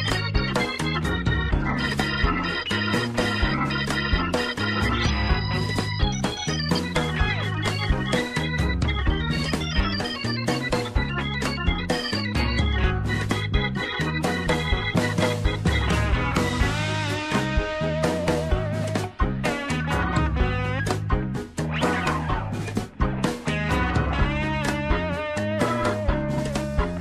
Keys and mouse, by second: 0.8 middle click, 1.2 middle click, 2.5 shift+middle click, 2.9 middle click, 3.4 shift+middle click, 4.1 shift+middle click, 4.4 Tab, 4.9 shift+middle click, 6.4 ctrl+r, 9.1 shift+middle click, 10.0 shift+middle click, 10.3 Tab, 10.8 middle click, 11.2 middle click, 11.7 middle click, 12.1 middle click, 12.9 shift+middle click, 13.5 Tab, 14.1 middle click, 16.0 ctrl+r, 18.1 middle click, 18.6 Tab, 18.9-21.3 middle drag, 21.4 Tab, 22.6 Tab, 22.9-24.2 middle drag, 24.8 shift+middle click, 25.8 shift+middle click, 26.1-27.0 middle drag.